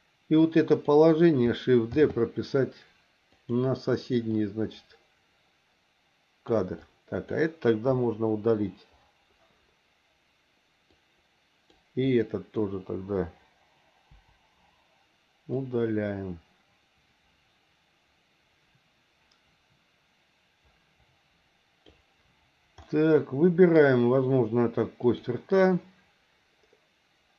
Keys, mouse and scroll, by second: 0.4 click, 2.0 shift+d, 4.4-6.6 drag, 6.8 click, 7.9 Delete, 10.9 click, 12.1 click, 14.1 Delete, 15.6-22.0 drag, 22.9 middle click, 25.0 click.